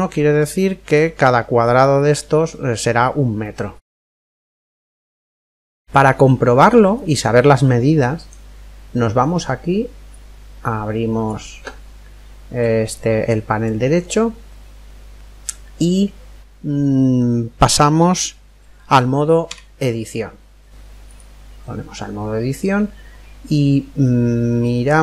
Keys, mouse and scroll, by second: 1.4-2.8 scroll up 1, 2.8-5.3 middle drag, 5.3-5.8 scroll up 1, 5.8-7.4 middle drag, 7.4 scroll up 1, 7.6-9.3 middle drag, 9.4 middle click, 10.2 click, 19.5 Tab, 24.0 middle click.